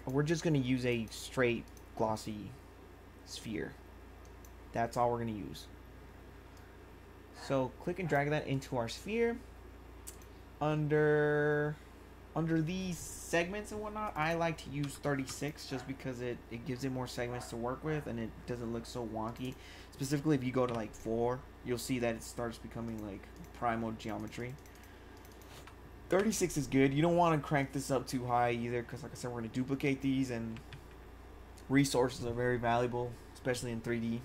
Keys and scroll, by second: 14.8 3, 15.1 6, 20.7 4, 24.6 4, 26.1 6.